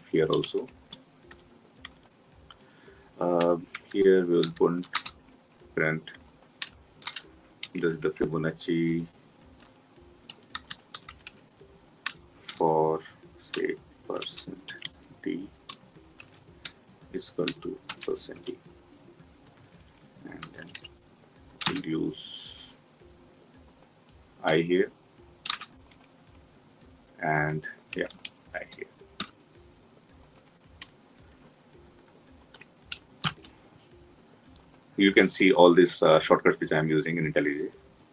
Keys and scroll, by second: 33.0 Escape, 33.0 ctrl+alt+l.